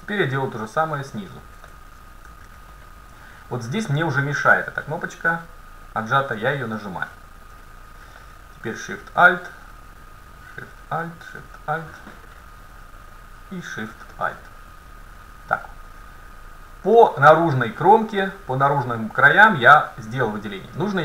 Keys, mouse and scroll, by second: 1.0-2.9 right drag, 2.3 ctrl+z, 2.8 middle click, 3.7-4.0 scroll down 1, 6.0-7.8 drag, 6.7-9.3 middle drag, 9.4-13.3 right drag, 13.4-15.3 right drag, 14.2-16.0 middle drag, 17.7-19.5 middle drag.